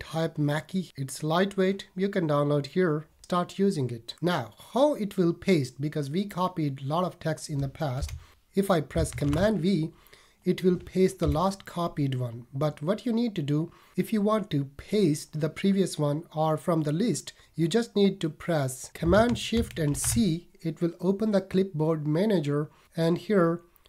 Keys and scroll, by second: 7.9 BackSpace, 9.2 super+v, 11.2 BackSpace, 19.9 shift+super+c.